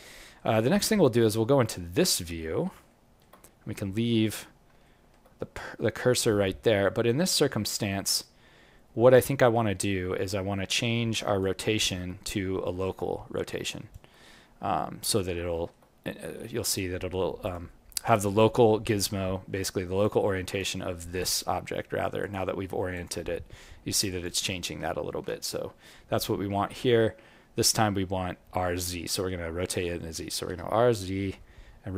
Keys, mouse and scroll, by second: 0.0 alt+middle click, 0.8 ctrl+middle click, 1.4 scroll up 1, 2.4 scroll up 10, 2.8 alt+middle click, 3.5-4.2 scroll up 4, 4.8 alt+middle click, 6.1 scroll up 1, 9.8-10.5 scroll down 8, 10.7 alt+click, 11.7 alt+middle click, 12.1-12.6 scroll down 2, 12.6 alt+middle click, 13.1-13.6 scroll up 4, 13.6 alt+click, 14.3-14.7 scroll up 2, 14.7 alt+middle click, 16.7-17.4 scroll up 2, 17.4 click, 19.0-19.5 scroll down 5, 19.5 alt+middle click, 20.0 alt+click, 20.7 alt+middle click, 22.2 click, 24.9 ctrl+middle click, 25.8 scroll down 1, 25.8-26.2 scroll up 3, 28.2-29.0 scroll up 5, 30.4 r.